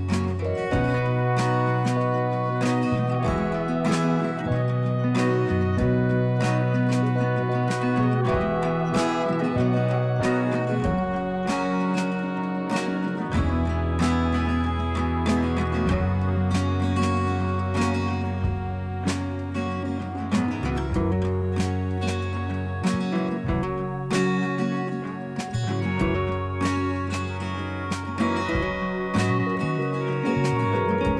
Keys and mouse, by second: 1.4 click, 7.1 click, 10.1 click, 11.5 click, 12.3 click, 16.1 click, 19.8 click, 22.5 click, 23.7 click, 26.6 alt+click, 28.1 alt+click, 29.8 ctrl+z, 30.7 ctrl+z.